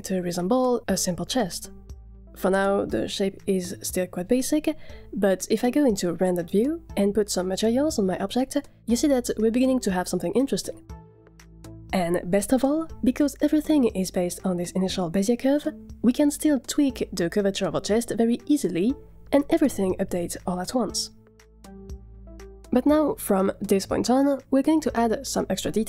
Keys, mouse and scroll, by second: 5.3 middle click, 5.3 scroll down 3, 5.3-7.3 typing, 5.9 middle click, 6.2 shift+click, 6.9 scroll up 3, 7.0 middle click, 7.2 click, 7.5 click, 7.9 scroll down 6, 8.1 click, 8.2 click, 8.4 click, 8.7-9.6 scroll down 5, 9.2 click, 9.4 click, 9.5 middle click, 9.6 click, 10.3 click, 10.5 scroll down 1, 10.7 shift+middle click, 12.1-12.9 middle drag, 14.3 Tab, 14.3 click, 15.1 Tab, 16.3 g, 18.5 click, 18.8 shift+click, 19.1 s, 23.0 Tab, 23.4 click.